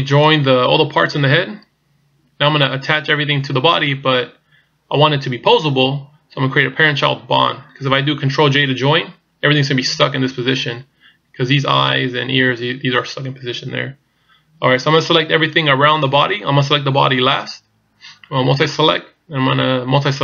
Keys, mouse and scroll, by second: 0.2 right click.